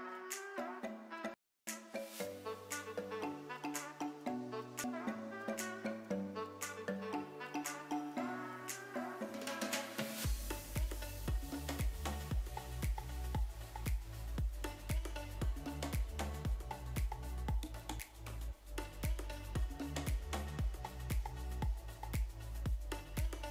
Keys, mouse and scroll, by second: 1.4 x, 2.4 KP_3, 3.1 click, 4.9 g, 7.7 click, 9.8 KP_3, 9.8 g, 12.0 middle click, 13.1 Tab, 13.5 click, 16.2 click, 17.9 shift+middle click, 18.7 Tab, 19.3 click, 19.9 click, 20.8-21.4 middle drag, 23.2 click.